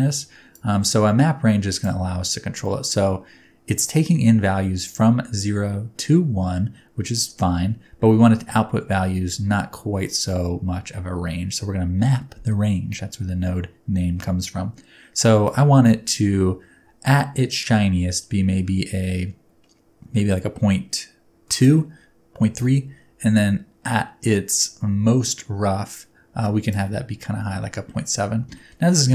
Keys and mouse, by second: 0.6-1.8 drag, 15.4-21.7 shift+drag, 22.7-26.8 ctrl+shift+drag, 28.6 shift+middle click.